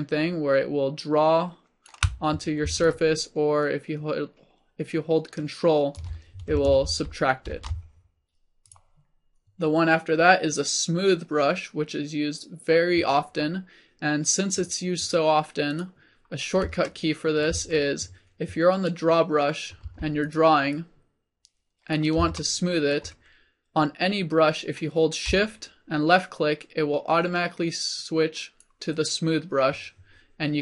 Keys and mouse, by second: 7.6 ctrl+z, 8.4 ctrl+z, 17.2-18.8 drag, 19.9 f, 20.8-22.5 drag, 29.5-30.6 drag.